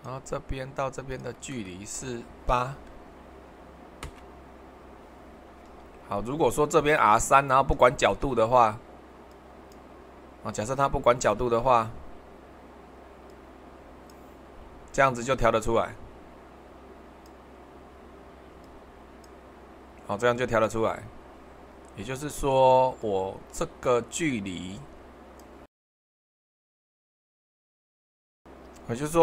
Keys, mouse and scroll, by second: 1.1-3.7 drag, 3.7 typing, 4.0 Return, 7.3-8.7 shift+middle drag, 28.3 super+1.